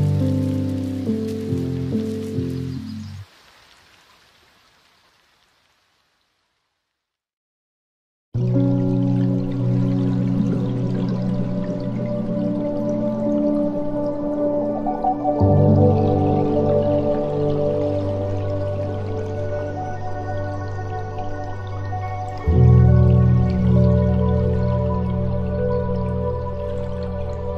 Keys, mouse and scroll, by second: 3.7 drag, 5.5 drag, 9.7-12.9 middle drag, 12.9 scroll up 2, 13.8 click, 15.0-17.4 drag, 17.4-18.2 scroll down 4, 18.2-20.0 drag, 20.0 scroll down 2, 22.1-23.7 drag, 23.7-24.7 scroll down 4, 24.7-25.0 drag, 25.0 scroll down 2, 25.8-27.0 drag, 27.0-27.5 scroll down 2.